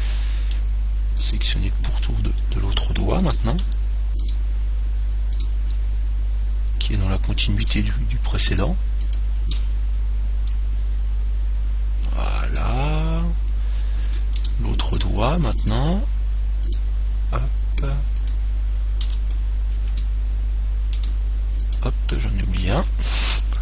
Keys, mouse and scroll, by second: 0.2-1.4 middle drag, 1.4 click, 1.4 right click, 1.7 middle click, 4.4-7.3 right drag, 7.8-11.0 right drag, 10.7 click, 13.3-15.3 middle drag, 14.3-20.1 right drag, 19.5-22.0 middle drag, 21.8 right click, 22.7-23.6 middle drag.